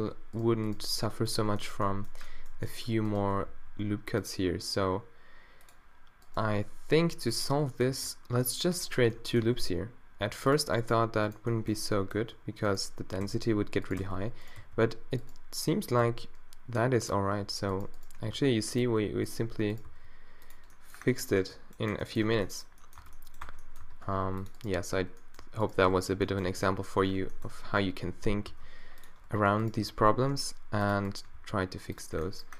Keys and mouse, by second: 0.9 g, 1.7 middle click, 3.5 d, 6.5 x, 7.9 ctrl+r, 9.6 g, 10.6 click, 10.6 right click, 10.8 middle click, 11.4-12.8 middle drag, 13.2 f, 14.0 f, 14.6 f, 16.0 d, 18.3 d, 19.9 d, 20.8-22.3 middle drag, 21.4 Tab, 22.3 Tab, 23.0 Tab, 23.5 Tab, 23.8 a, 24.2 b, 24.6-26.1 drag, 26.1 z, 26.5 b, 27.0 click, 27.2 z, 28.5 d, 29.9 d, 31.3 d.